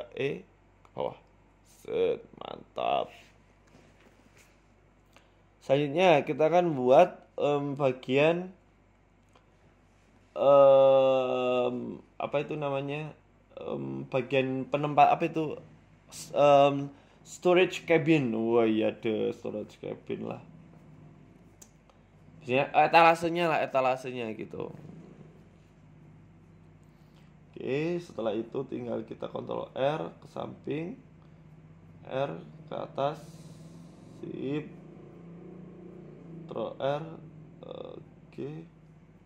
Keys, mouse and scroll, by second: 0.6 right click, 1.1 shift+right click, 1.6 KP_1, 2.3 e, 4.2 shift+middle click, 4.6-5.1 scroll down 2, 4.9 shift+middle click, 5.2 Tab, 5.4 scroll up 1, 5.6 shift+middle click, 5.9 shift+a, 6.6 Tab, 7.0 shift+a, 8.4 ctrl+z, 9.3 Tab, 9.7 shift+s, 10.6 Tab, 10.9 shift+s, 12.3 Tab, 12.5 shift+a, 13.5 s, 14.5 g, 16.9 s, 18.3 g, 19.7 middle click, 20.9 s, 22.7 middle click, 23.0-23.5 scroll up 3, 23.3 middle click, 24.1 KP_1, 24.7 g, 26.0 middle click, 26.4 middle click, 26.6 Tab, 26.9 middle click, 27.2 Tab, 28.2 KP_1, 29.5 KP_1, 30.1 ctrl+r, 31.0 s, 33.4 ctrl+r, 36.0 middle click, 36.6 KP_3, 37.2 ctrl+r, 38.0 s.